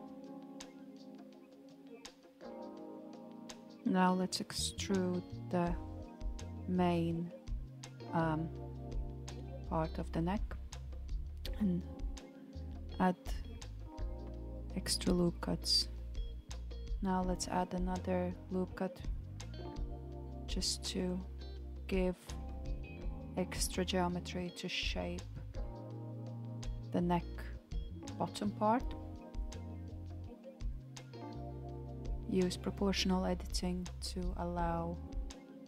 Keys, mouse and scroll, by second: 2.3 shift+middle click, 3.3 alt+click, 6.7 e, 13.6 ctrl+r, 23.4 ctrl+r, 26.7 s.